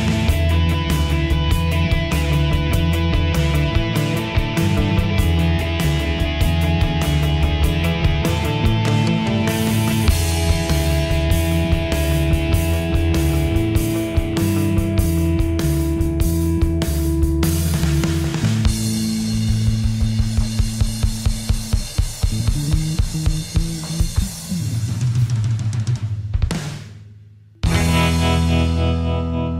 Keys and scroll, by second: 0.5 ctrl+d.